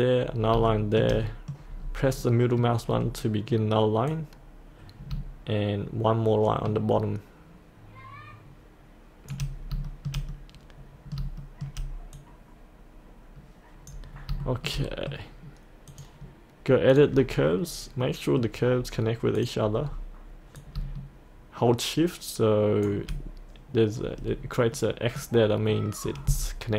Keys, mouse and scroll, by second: 0.3 scroll up 1, 0.7 shift+middle click, 1.3 middle click, 1.8-2.2 scroll down 1, 2.2-3.9 middle drag, 4.1-9.3 drag, 9.6 scroll up 1, 9.9 shift+middle click, 10.1-11.2 shift+middle drag, 11.4 shift+middle click, 12.2-14.1 drag, 14.1 scroll up 1, 14.8 middle click, 15.9 click, 17.6-18.1 scroll down 1, 18.1 middle click, 18.8-19.4 scroll down 1, 19.4 click, 19.8-20.6 scroll down 1, 20.6-22.2 drag, 24.2-24.8 scroll up 1, 24.8 middle click.